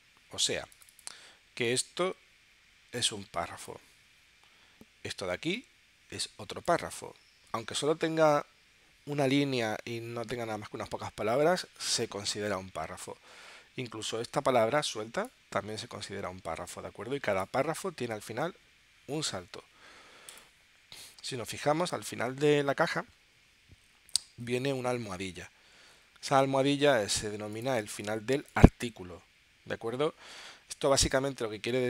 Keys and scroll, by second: 27.8 space.